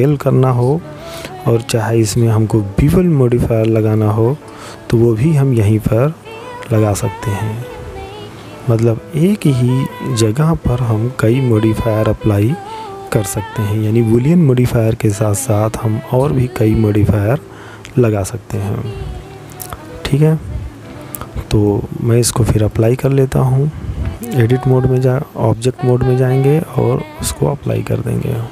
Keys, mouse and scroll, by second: 4.1 click, 9.4 click, 16.7-17.8 scroll up 5, 17.8-20.2 scroll down 1, 20.4 click, 25.9 click, 28.3 click.